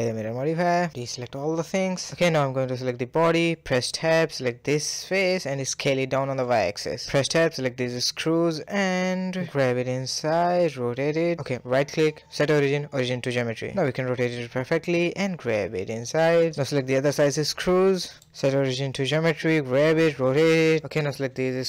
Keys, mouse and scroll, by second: 0.1 KP_1, 0.3-0.7 scroll down 1, 0.7-1.4 shift+middle drag, 1.4 a, 1.5 a, 2.0-2.7 middle drag, 2.7 click, 2.8-4.2 shift+middle drag, 4.2 click, 4.6 middle click, 5.0 s, 5.6 Tab, 5.9-6.7 shift+middle drag, 6.7-7.0 scroll up 2, 7.0-7.5 shift+middle drag, 7.5 click, 8.3 shift+click, 8.7 KP_3, 9.2-9.7 scroll up 3, 9.7-10.2 shift+middle drag, 10.2 g, 10.8 r, 12.0-13.6 right drag, 13.6 r, 13.7 g, 14.6 r, 14.8 click, 15.0-15.7 middle drag, 15.7-16.2 scroll down 1, 16.2 shift+click, 16.4 KP_3, 16.7-17.1 scroll up 3, 17.1 shift+middle click, 17.5-18.8 right drag, 18.8 g, 19.1 r, 19.2 g, 19.6 scroll down 1, 19.8-20.2 middle drag, 20.2 ctrl+KP_1, 20.8-21.3 scroll up 1, 21.3 click.